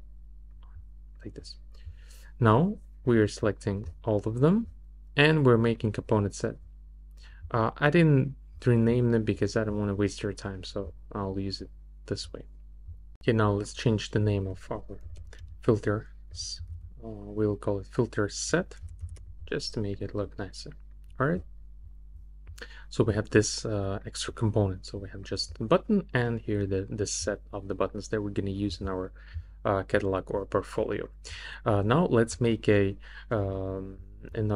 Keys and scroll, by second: 18.8 e, 19.3 t.